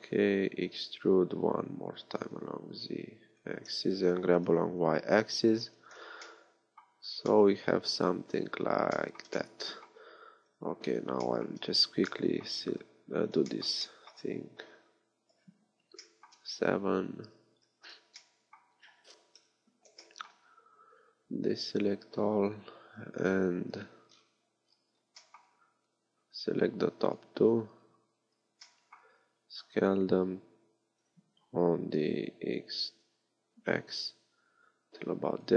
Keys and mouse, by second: 0.6 e, 3.7-5.7 drag, 4.2 g, 6.3 click, 7.0 z, 10.5 KP_1, 15.4 KP_7, 17.6 z, 19.4 KP_7, 21.2 a, 25.6 b, 29.6 s.